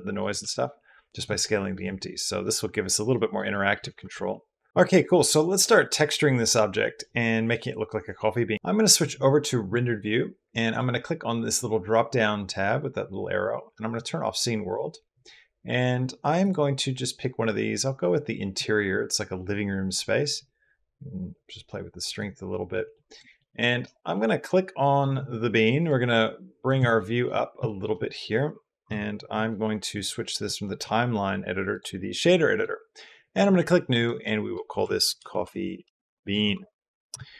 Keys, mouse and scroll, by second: 0.2 s, 1.2-1.6 middle drag, 1.6 s, 2.4-2.7 middle drag, 2.9-3.3 middle drag, 3.3 middle click, 3.6 s, 3.9 z, 10.6-22.5 middle drag, 22.7 middle click, 23.1 shift+middle click, 23.9 click, 25.7 middle click, 26.1 click, 26.8 shift+drag, 27.5 shift+drag, 28.7 n, 29.7-31.6 drag, 33.8 click, 34.8 click, 35.1 f, 35.4 e, 35.9 click, 37.2 click.